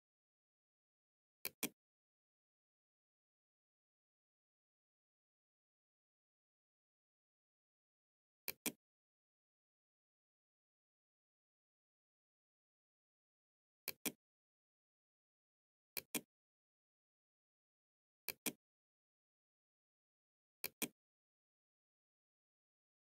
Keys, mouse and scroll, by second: 0.1 click, 7.5 click, 12.9 click, 14.9 click, 17.3 click, 19.3-20.3 drag, 23.0 click.